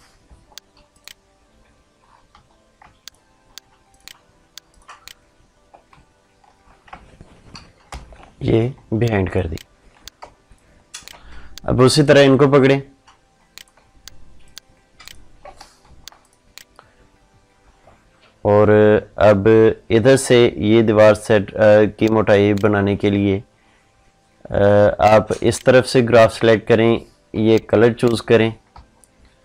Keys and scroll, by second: 7.7 ctrl+shift+[, 11.0 ctrl+space.